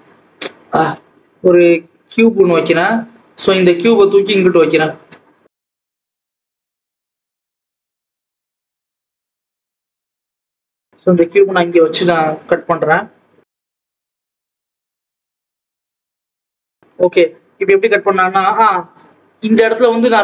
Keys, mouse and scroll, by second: 0.5 ctrl+z, 0.9 shift+a, 2.6-3.7 scroll down 1, 3.7 g, 4.9 Tab, 5.1 s, 6.1 ctrl+z, 6.3 ctrl+z, 6.8 click, 7.5-10.1 typing, 8.1 Tab, 9.1 scroll up 1, 9.7 scroll up 2, 9.8 Tab, 11.0-11.6 scroll down 1, 11.6 click, 13.1 scroll down 1, 13.3 Tab, 13.5 s, 14.5 s, 15.5 Tab, 15.7 alt+a, 15.9 click, 17.1 click, 18.3-20.2 scroll down 2.